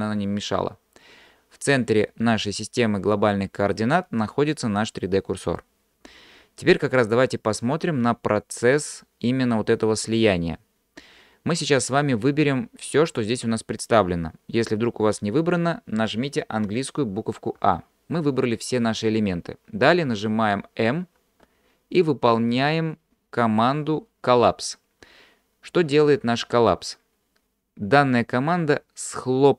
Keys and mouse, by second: 17.6 a, 21.2 m.